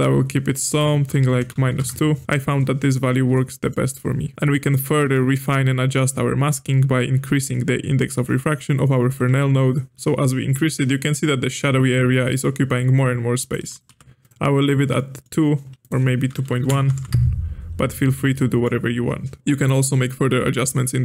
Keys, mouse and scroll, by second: 0.7-3.1 drag, 3.3-8.2 middle drag, 9.3 click, 10.5-13.5 shift+drag, 13.7 click, 14.9 middle click, 15.8-18.0 drag, 18.0-18.3 scroll down 2, 18.3-19.4 middle drag, 19.4 scroll up 4, 19.5 middle click, 20.5-21.0 drag.